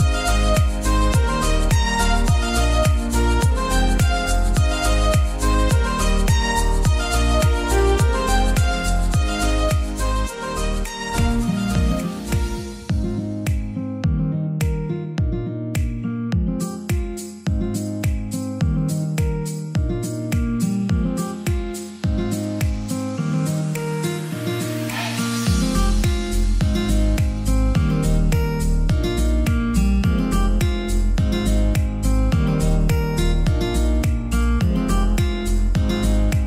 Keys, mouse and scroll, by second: 3.2 click, 8.1 click, 9.5 scroll down 1, 9.9-10.8 scroll up 1, 10.8-12.6 drag, 12.6 right click, 13.5-20.3 drag, 20.3 shift+right click, 23.3 scroll down 1, 23.9 scroll up 1, 25.1 click, 29.4-34.7 drag.